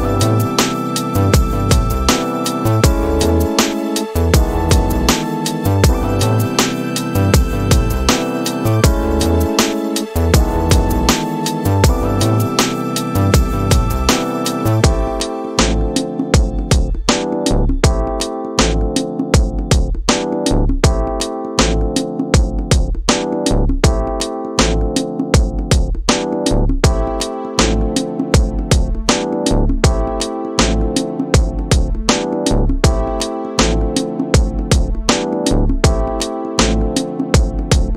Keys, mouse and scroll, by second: 1.9 space, 2.6-3.8 middle drag, 4.4 middle click, 10.3-12.7 drag, 15.6 click, 17.7 click, 19.2-20.3 drag, 21.5 middle click, 27.1-37.9 drag.